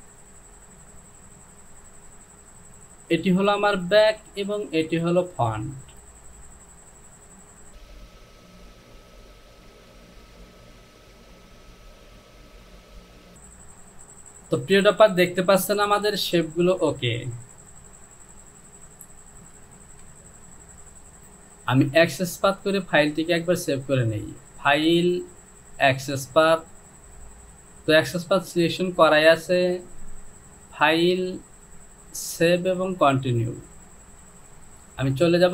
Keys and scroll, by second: 13.4 Home, 20.0 Return.